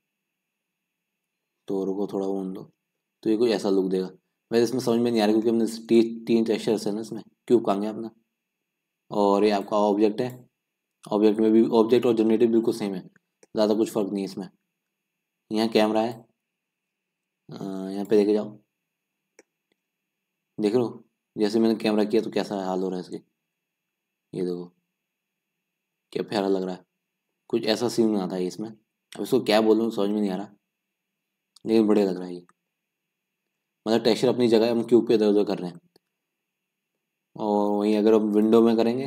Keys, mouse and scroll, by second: 1.0-1.3 scroll down 2, 1.3-1.8 scroll up 3, 1.8-2.9 middle drag, 2.9 scroll up 2, 3.0-4.4 middle drag, 4.4-5.4 scroll down 8, 5.4-6.1 scroll down 1, 6.1-6.5 scroll down 1, 6.5 scroll up 1, 6.7-10.3 middle drag, 10.3 click, 11.2 scroll down 4, 11.5-12.4 scroll up 2, 12.4-13.1 scroll up 3, 13.1-14.2 scroll down 2, 18.2-19.2 drag, 19.2 scroll down 1, 19.4-20.9 middle drag, 20.9 scroll up 4, 22.2-27.4 middle drag, 27.4 scroll down 1, 27.6-30.0 middle drag, 30.0 scroll up 2, 30.2-39.0 middle drag.